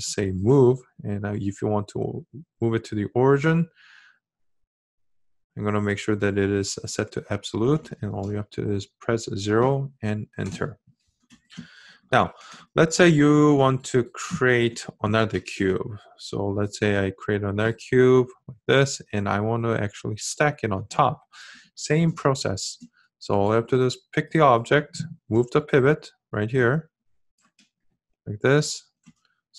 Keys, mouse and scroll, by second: 28.7-29.5 ctrl+shift+middle drag.